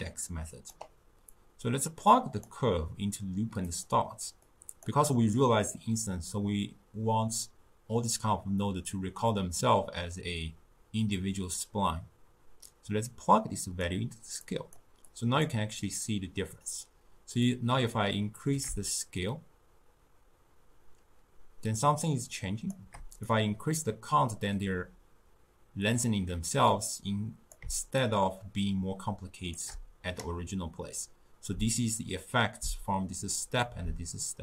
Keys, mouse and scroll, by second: 3.7 click, 4.5 click, 12.7-14.6 drag, 15.1 click, 17.5-20.6 drag, 23.3-26.3 drag, 28.1-31.1 shift+drag.